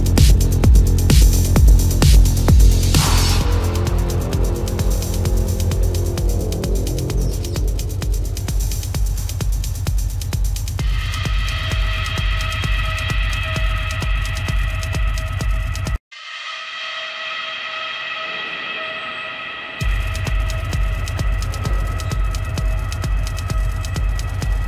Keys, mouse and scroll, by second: 2.6 ctrl+alt+z, 8.7 space, 8.9 ], 9.2 ctrl+alt+z, 9.3 ctrl+=, 11.4 ], 12.5 ctrl+-, 16.8 ctrl+alt+z, 18.6 ], 22.1 ctrl+alt+z.